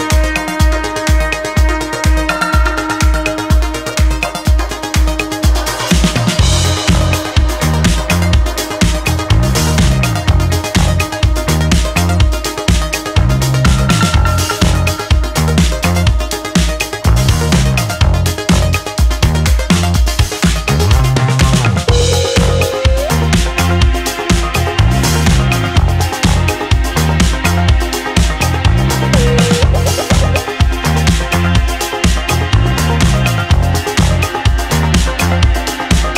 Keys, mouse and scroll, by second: 1.3 click, 2.6 ctrl+z, 3.6 click, 4.6 ctrl+z, 6.1 s, 12.3 alt+s, 13.7 s, 23.2-24.7 drag, 25.0 ctrl+z, 27.1 s, 29.9 middle click.